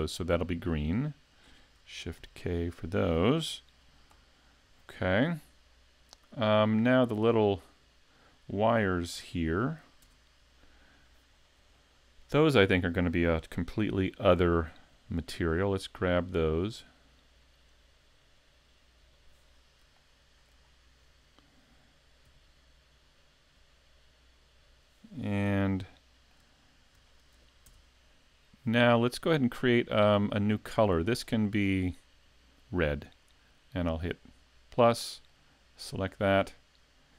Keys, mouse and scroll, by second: 2.2 shift+k, 4.7 a, 5.2 scroll up 1, 6.4-6.7 scroll down 1, 7.4-7.8 scroll down 1, 8.1-8.4 scroll up 1, 10.0 Tab, 11.3 scroll up 2, 11.7 shift+middle click, 13.8 l, 14.9 l, 15.6 l, 16.6 l, 17.8 l, 19.0 l, 20.0 shift+middle click, 20.6 scroll up 3, 22.3 l, 23.6 l, 25.1-25.7 scroll down 1, 25.1 l, 25.7 shift+middle click, 25.7 scroll down 2, 26.6-27.2 scroll down 2, 27.1 shift+middle click, 27.7 Tab, 31.2 click, 34.1 click, 35.3 click.